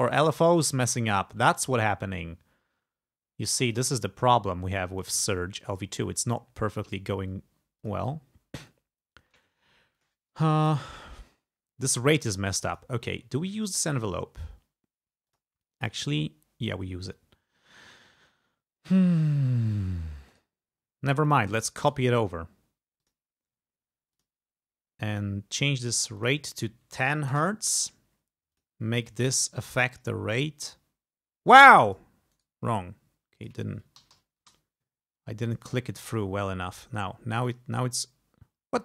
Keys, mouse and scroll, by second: 1.7 click, 3.8 click, 5.8-7.1 drag, 7.9 click, 10.0 click, 12.8 click, 15.3 click, 20.4 right click, 21.3 click, 21.9 right click, 23.1 click, 24.2 click, 25.2 right click, 26.2 click, 26.8-27.7 typing, 28.6 click, 29.1 click, 30.0 click, 30.7-32.2 drag, 32.4 right click, 33.5 click, 33.8-34.7 typing, 35.6 click, 36.1 click, 37.5 click.